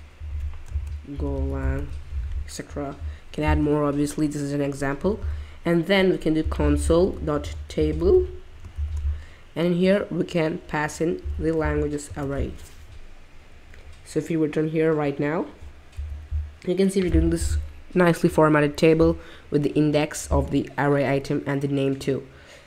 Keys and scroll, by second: 0.7-2.2 typing, 4.9-8.7 typing, 11.0-12.1 typing, 14.2 typing.